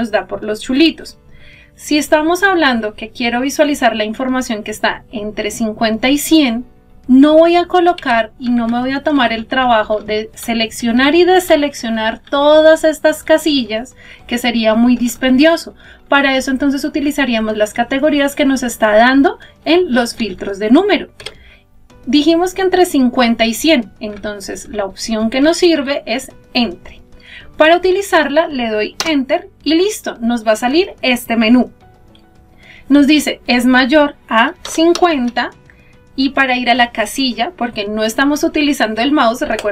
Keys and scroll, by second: 27.7 Return.